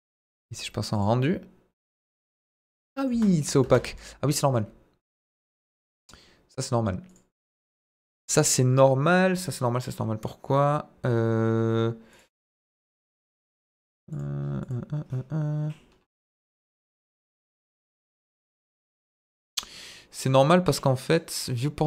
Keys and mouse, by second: 0.9 click, 1.7-2.4 middle drag, 2.9 middle click, 3.1 space, 3.4 middle drag, 3.6 space, 5.0 click, 5.4 click, 7.0 click, 12.1 click, 14.1 click, 14.6 click, 21.1 click.